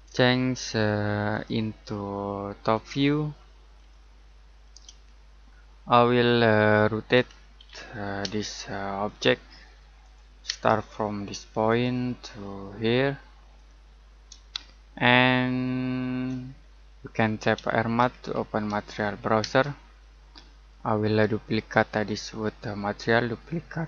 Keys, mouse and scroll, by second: 1.3 click, 7.1-8.2 typing, 9.0 click, 10.4 space, 11.6 click, 14.6 middle click, 16.4-17.0 scroll down 1, 17.0 middle click, 17.3-19.4 typing, 21.5 right click.